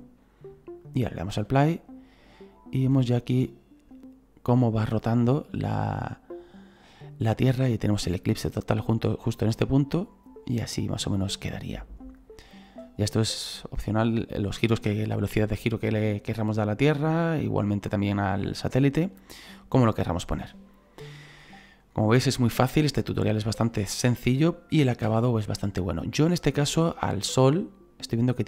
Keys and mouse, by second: 0.8 click, 25.0 space, 27.1 click.